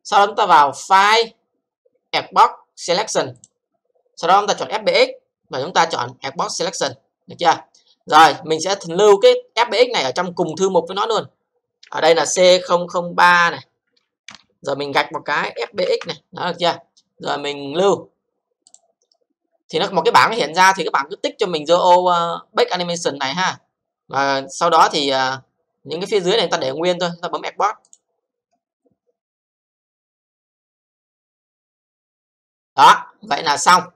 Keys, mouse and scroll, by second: 1.1 click, 3.3 click, 6.8 click, 8.6-9.1 scroll up 3, 9.1 click, 10.4 click, 11.8-16.5 typing, 18.6 click, 20.6-21.3 scroll up 3, 21.3-23.5 scroll down 3, 23.7-24.4 scroll down 7, 27.9 click.